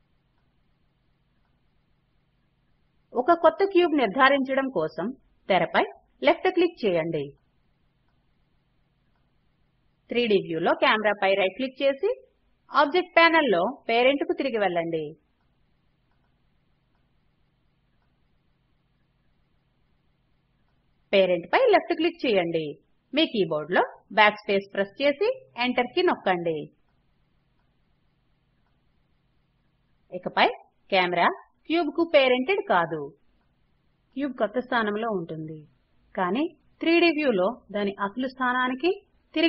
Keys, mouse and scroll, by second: 1.5 click, 2.0 click, 8.5 right click, 17.5 click, 18.0 click, 18.5 click, 23.5 BackSpace.